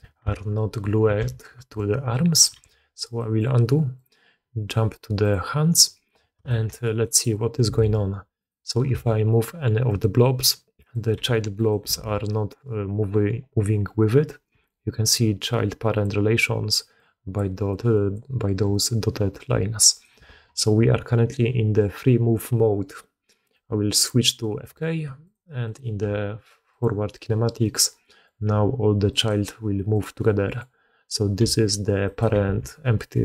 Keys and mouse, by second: 0.5 ctrl+z, 1.8 ctrl+z, 2.6 alt+a, 3.1 drag, 3.9 click, 5.4 click, 6.4 shift+middle drag, 7.0 middle drag, 7.7 alt+a, 8.9 g, 10.8 click, 11.1 g, 11.9 alt+a, 12.2 click, 14.4-18.6 d, 14.6-16.0 drag, 16.3 click, 16.9 click, 17.6 click, 18.6-20.0 drag, 20.1 d, 20.2 alt+a, 23.6 click, 25.2 click, 25.6 click, 25.9 g, 27.6 click, 27.9 click, 28.4 g, 29.9 click, 30.4 click, 32.4 alt+a.